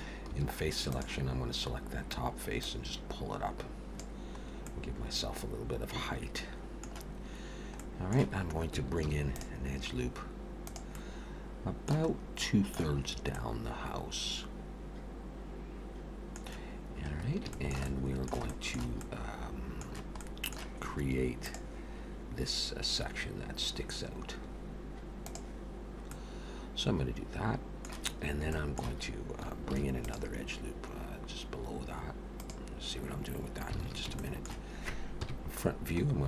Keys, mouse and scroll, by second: 0.3 4, 0.9 click, 1.7-2.1 scroll down 3, 2.6 click, 4.4-4.8 scroll up 2, 4.7 middle click, 7.7 middle click, 9.0 ctrl+r, 11.0 middle click, 12.1-12.7 scroll up 2, 12.4 middle click, 13.3 middle click, 17.2 scroll up 1, 17.5 shift+middle click, 17.8 shift+middle click, 18.5 shift+middle click, 19.0 middle click, 20.1 middle click, 26.0 middle click, 28.5 shift+middle click, 29.7 ctrl+r, 33.8 alt+a, 34.2 shift+middle click, 35.2 KP_1, 36.0-36.2 scroll up 1.